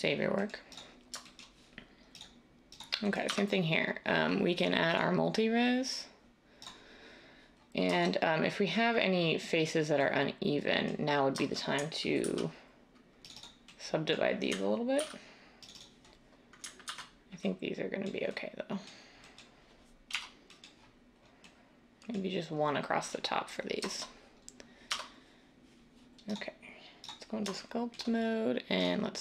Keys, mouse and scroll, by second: 3.3 Tab, 12.2 ctrl+r, 15.0 ctrl+r, 16.8 ctrl+z, 20.1 \, 24.8 Tab.